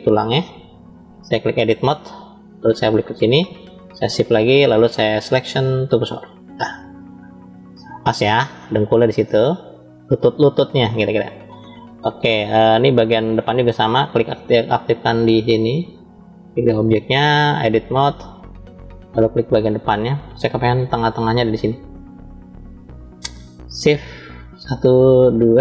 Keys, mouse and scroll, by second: 1.3-2.0 drag, 2.5 click, 3.9 shift+s, 6.9-8.2 shift+middle drag, 8.4 scroll up 2, 9.1-11.5 middle drag, 12.5-13.5 drag, 14.0 click, 15.0-15.7 drag, 16.2 click, 17.5-18.2 drag, 18.8-19.9 middle drag, 19.9 scroll down 2, 20.9 middle click, 23.6 click, 24.5 shift+click.